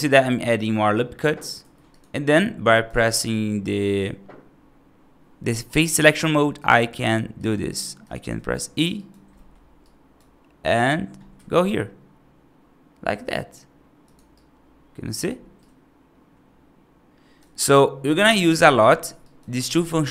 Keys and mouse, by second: 0.8 right click, 1.5 3, 1.7 click, 2.5 right click, 6.4 shift+click, 8.4 right click, 8.8 right click, 9.2 middle click, 9.7 right click, 11.2 e, 14.2 right click, 15.5-17.3 right drag, 19.1 right click, 19.5 ctrl+z.